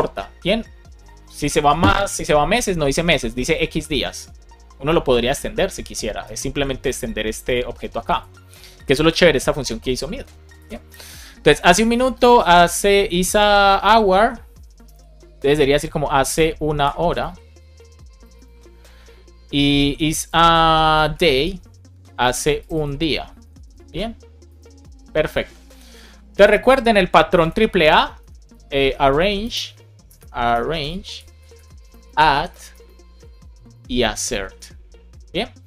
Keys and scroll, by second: 16.7 Right, 28.1 space, 28.7 shift+a, 30.0 BackSpace, 30.9 Return, 31.8 space, 32.0 shift+a, 32.6 Return, 33.5 space, 33.7 shift+a.